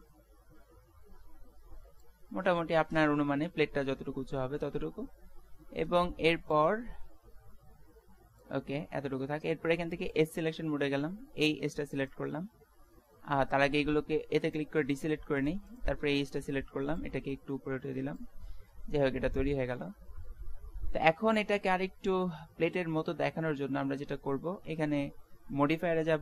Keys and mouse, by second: 2.4-8.2 middle drag, 6.6-8.4 drag, 6.6-8.2 right drag, 9.8-11.3 middle drag, 10.1-11.8 drag, 12.1 right click, 13.7 a, 14.9-17.0 right drag, 17.0-18.2 middle drag, 18.2 click, 18.6 middle click, 19.9 Tab.